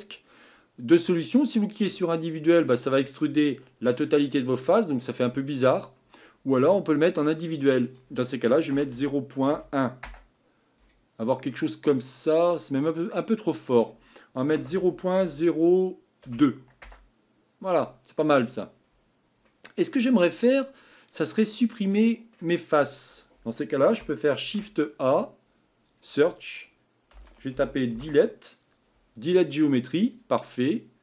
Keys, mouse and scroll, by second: 1.8 click, 2.3-5.8 scroll down 4, 7.3 click, 10.0-11.2 drag, 11.2-12.0 scroll up 4, 12.0 middle click, 12.5 scroll down 1, 12.6-16.5 scroll up 1, 18.1-18.7 scroll up 2, 18.7-19.5 scroll down 3, 22.0-30.2 middle drag.